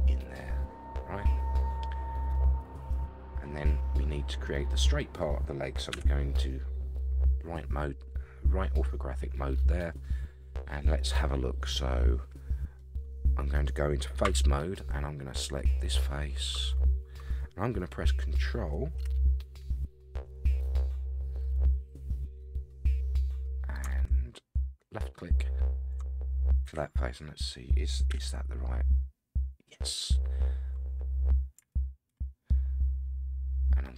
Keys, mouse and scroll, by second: 2.9 Tab, 3.4-3.8 scroll down 4, 3.8 middle click, 5.9 KP_3, 7.1-7.9 scroll up 4, 12.8-14.0 middle drag, 14.2 3, 15.6 click, 21.7-22.9 middle drag, 25.0 ctrl+click, 26.6 KP_1, 28.1 KP_3, 31.2-31.6 scroll down 1, 32.5-33.9 shift+middle drag.